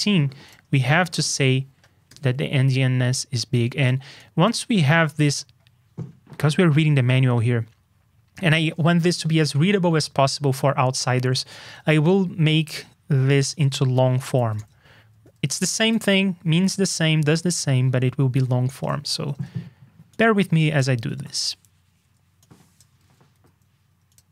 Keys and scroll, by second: 1.0 super+v, 5.1 super+Tab, 8.6 super+Tab, 11.6 super+Tab, 14.3 super+c, 14.5 super+Tab, 15.3 super+d, 15.9 super+v, 17.4 super+Tab, 20.9 super+c, 21.1 super+Tab, 23.0 super+d, 23.3 super+v.